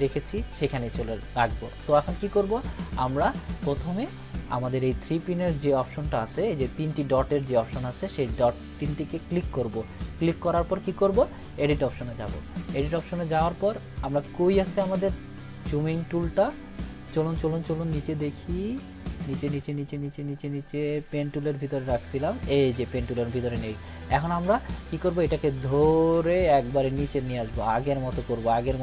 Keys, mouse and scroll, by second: 3.8 click, 8.9-10.2 drag, 14.2-22.7 drag.